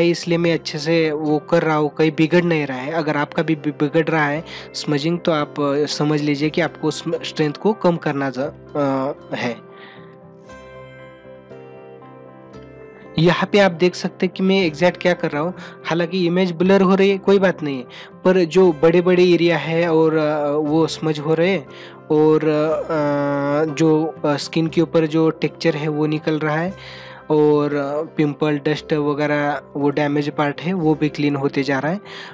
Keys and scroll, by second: 14.9 ctrl+=, 16.4 ctrl+-, 18.9 space, 20.4 ], 25.5 space.